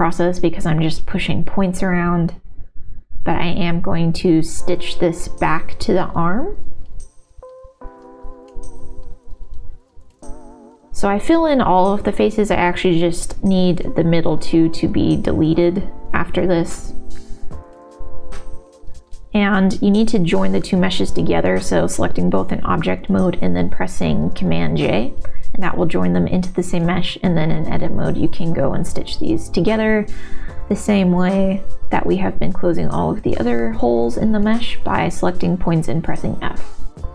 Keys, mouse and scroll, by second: 0.0 1, 0.2 g, 1.4 middle click, 1.9 g, 2.4 middle click, 3.3 middle click, 4.0 middle click, 4.9 g, 5.6-7.1 middle drag, 7.6 click, 8.6 f, 9.4 shift+r, 9.8 middle click, 10.1 ctrl+z, 10.3 middle click, 10.8 click, 11.1 middle click, 11.9-14.0 typing, 15.1 o, 15.5 g, 17.0 g, 18.5 middle click, 19.0 m, 19.2 Tab, 19.9 ctrl+j, 20.3 Tab, 21.1 shift+click, 21.5 f, 23.5 middle click, 24.0 ctrl+z, 24.8 f, 24.9 middle click, 26.5 f, 26.6 middle click, 28.6 shift+click, 29.6 f, 29.8 f, 30.0 middle click, 32.4 middle click, 32.4 f, 32.8 f, 32.9 middle click, 35.0 middle click, 36.7 middle click.